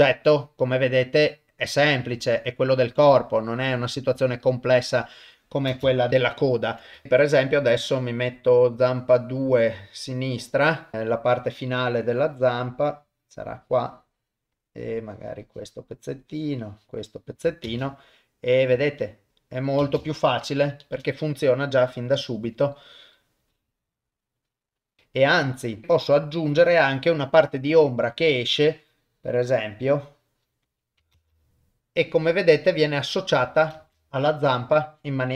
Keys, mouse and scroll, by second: 5.7 shift+space, 6.1 shift+Left, 6.1 ctrl+middle click, 7.0 shift+middle click, 9.4 click, 10.9 ctrl+middle click, 12.0-14.4 drag, 15.0 click, 16.2 click, 17.7 shift+space, 19.8 shift+space, 20.8 shift+Left, 22.5 click, 23.4-24.5 drag, 25.8 click, 27.8 click, 28.8-30.5 drag, 31.1 shift+space, 33.8 shift+space, 34.6 shift+Left.